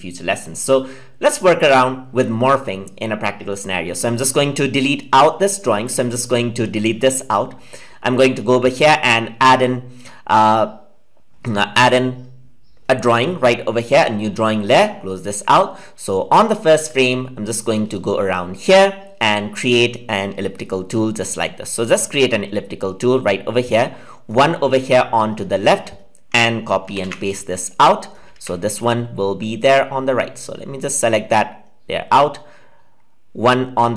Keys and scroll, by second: 26.8 ctrl+c, 27.0 ctrl+v, 28.3 ctrl+z.